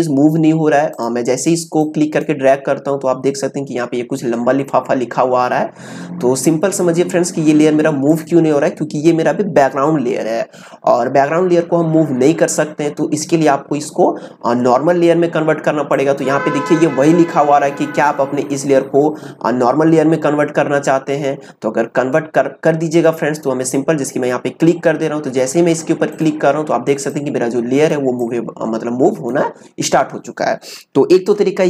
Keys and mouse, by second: 8.1 click, 15.9 click, 26.1-31.2 drag, 31.2 ctrl+z.